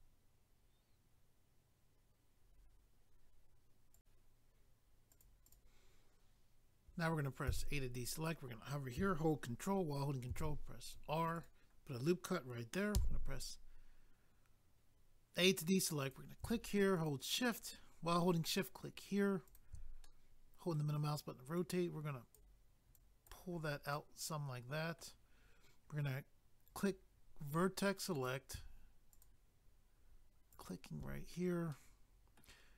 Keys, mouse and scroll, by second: 3.9 click, 5.1 click, 5.1 click, 5.2 click, 5.4 click, 5.5 click, 10.3 ctrl+r, 10.8 click, 10.9 click, 11.3 click, 11.4 click, 12.9 a, 16.0 click, 16.1 click, 17.0 shift+click, 17.1 shift+click, 18.4 shift+click, 18.5 shift+click, 19.5 shift+click, 19.6 shift+click, 20.0 middle click, 21.6 click, 23.0 click, 23.6 scroll down 1, 23.9 middle click, 26.7 click, 26.8 click, 28.2 click, 28.3 click, 29.1 shift+click, 29.2 shift+click, 30.5 shift+click, 30.6 shift+click, 31.7 middle click, 32.6 scroll up 1.